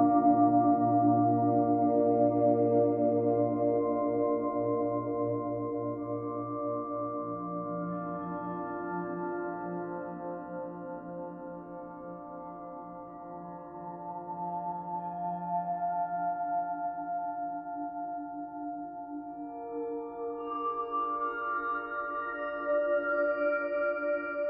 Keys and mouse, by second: 0.0-1.0 drag, 1.0 KP_6, 1.2 KP_0, 1.4 Return, 3.8-8.6 ctrl+alt+drag, 10.7 click, 12.0 click, 15.3 click, 19.8 alt+click, 22.0 click.